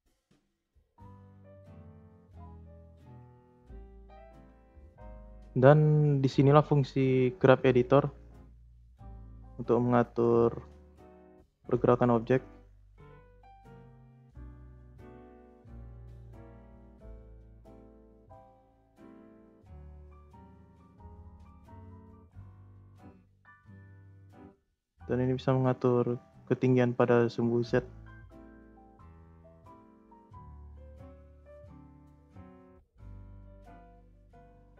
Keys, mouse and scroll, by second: 0.4 space, 0.9-1.4 drag, 2.0 click, 2.4 space, 3.3 space, 3.7-6.8 drag, 8.3-9.8 drag, 9.8-10.1 scroll down 2, 10.1-10.8 scroll up 2, 10.1 middle click, 10.8-11.1 scroll down 3, 11.7 middle click, 12.1 scroll up 1, 12.3-12.7 scroll down 3, 14.5 click, 14.9 space, 15.8 space, 16.6-18.4 drag, 18.4-19.4 middle drag, 19.4-20.7 scroll up 8, 19.7-20.0 middle drag, 20.7 click, 21.6 click, 23.3 space, 23.9 space, 24.8-27.9 drag, 30.0 space, 30.6 space, 31.3-33.8 drag.